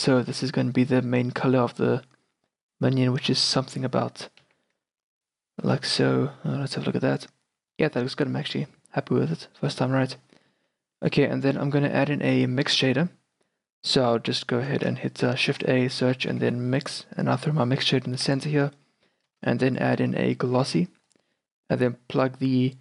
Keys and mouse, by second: 4.5 z, 5.8 shift+b, 6.7 shift+b, 10.2-11.5 middle drag, 12.8 shift+a, 14.7 Escape, 15.4 shift+a, 18.8 click, 19.2 middle click, 19.4 shift+a.